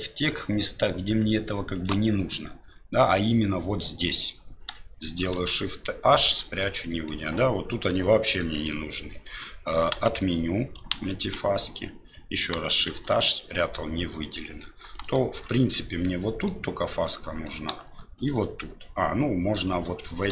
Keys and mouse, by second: 5.3 shift+h, 6.1 middle click, 7.9 click, 9.9 ctrl+z, 10.9 ctrl+z, 12.9 shift+h, 14.9 alt+right click, 15.5 middle click, 17.0 middle click, 18.2 alt+shift+right click.